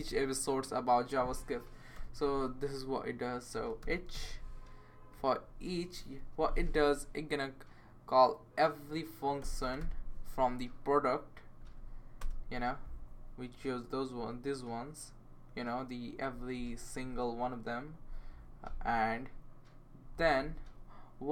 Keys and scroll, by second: 1.9 e, 3.3-4.1 typing, 5.7-6.5 typing, 9.1-10.3 typing, 11.6 Down, 11.7 Down, 12.2 Return.